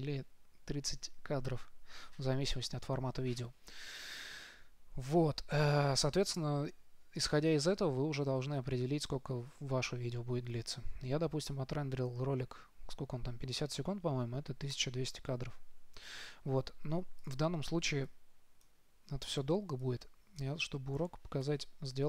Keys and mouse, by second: 15.0-16.6 drag.